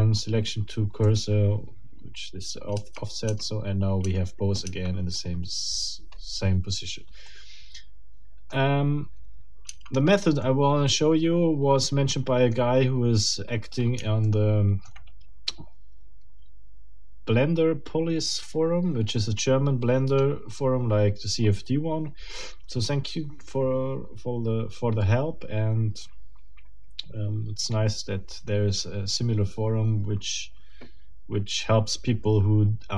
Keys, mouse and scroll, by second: 1.0 middle click, 2.7 Tab, 7.3-8.7 middle drag, 9.7 Tab, 10.4-12.7 middle drag, 14.2 shift+middle click, 20.1 scroll up 1, 22.2 scroll down 1.